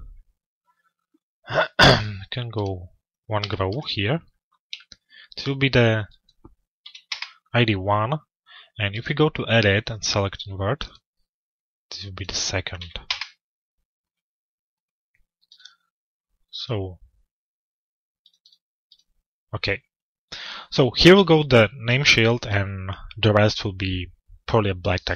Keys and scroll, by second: 6.6 Return, 12.6 Return.